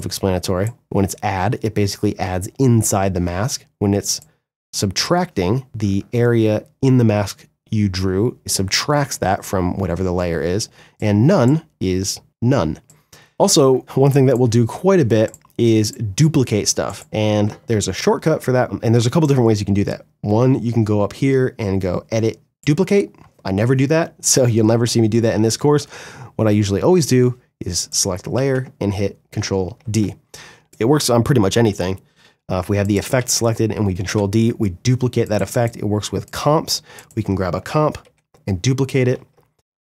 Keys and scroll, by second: 22.9 ctrl+z, 24.1 ctrl+z, 29.5 ctrl+d, 32.3 ctrl+d, 33.9 Delete, 37.2 ctrl+d, 38.3 ctrl+z.